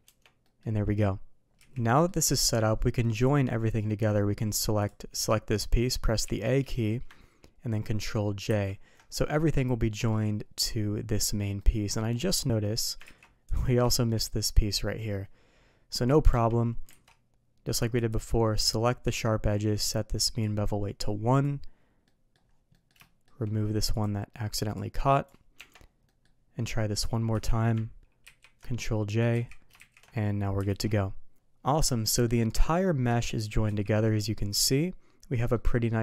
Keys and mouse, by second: 0.0 Tab, 0.4 middle click, 1.5 z, 1.8 middle drag, 3.1 click, 4.7 click, 6.2 a, 8.4 ctrl+j, 9.8 middle drag, 11.5 middle click, 12.7 middle click, 13.1 ctrl+z, 13.9 shift+middle drag, 16.3 Tab, 16.9 alt+a, 18.1-19.2 drag, 20.4-21.4 drag, 22.1 middle click, 22.7 middle click, 23.9 click, 24.7 click, 25.6 Tab, 26.1 middle drag, 27.0 click, 27.3 a, 28.3 ctrl+j, 29.3 ctrl+z, 30.7 alt+a, 31.9-32.3 middle drag, 33.1 middle click, 33.7 z, 35.5-36.0 middle drag.